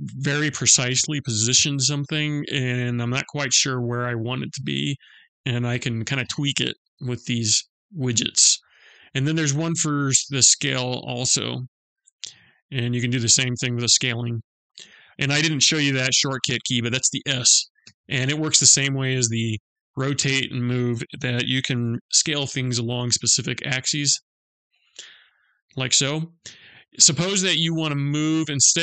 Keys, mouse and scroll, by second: 1.3 click, 9.7 click, 12.1 click, 14.1 ctrl+z, 17.4 s, 21.3 s.